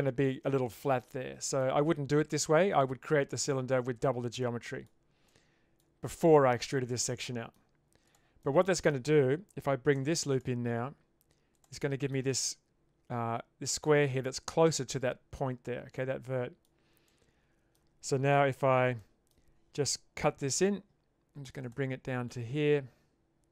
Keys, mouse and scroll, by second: 1.1 middle click, 4.4 middle click, 5.3 middle click, 7.2 middle click, 8.5 middle click, 10.0 ctrl+r, 11.8 middle click, 15.9 middle click, 17.1 middle click, 19.0 middle click, 20.4 k.